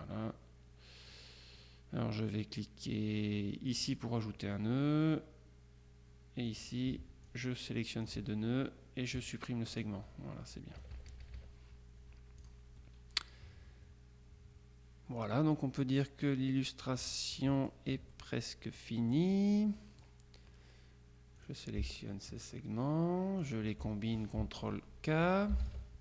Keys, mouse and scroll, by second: 3.8 click, 6.6 click, 7.3-8.6 drag, 9.3 click, 10.0 click, 10.9 KP_Subtract, 12.5 click, 17.6 middle click, 18.2 middle click, 18.8-19.9 drag, 19.9-21.3 scroll up 1, 21.4 click, 22.4 shift+click, 23.5 click, 25.6 ctrl+k.